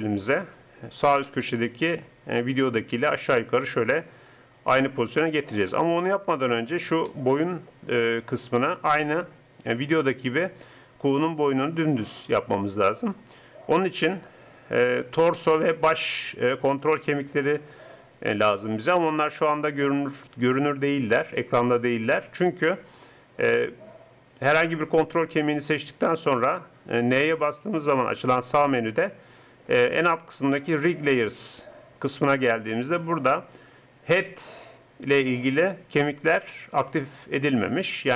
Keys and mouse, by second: 4.1-5.1 middle drag, 6.1 KP_3, 21.2 n, 24.7-27.2 drag, 27.2 n, 27.7 n.